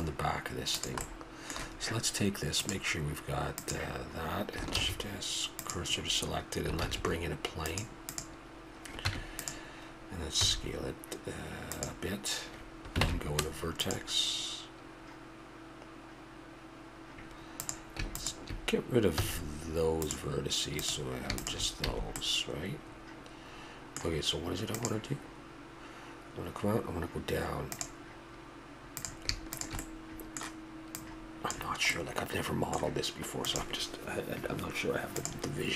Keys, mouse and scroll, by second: 1.4-4.3 drag, 4.7 shift+s, 6.8 shift+a, 9.1 Tab, 10.4 s, 13.0 ctrl+Tab, 19.2 x, 21.9 a, 22.2-23.6 middle drag, 29.0 click, 29.8-31.5 middle drag, 31.5 click, 33.0-33.5 drag.